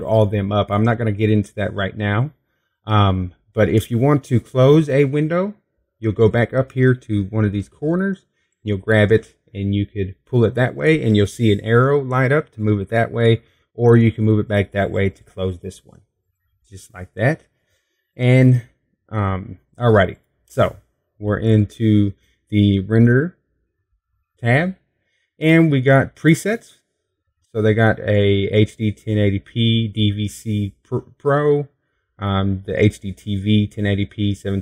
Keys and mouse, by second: 9.1-10.3 drag, 12.3 middle click, 16.5-19.9 middle drag, 20.2-34.6 drag.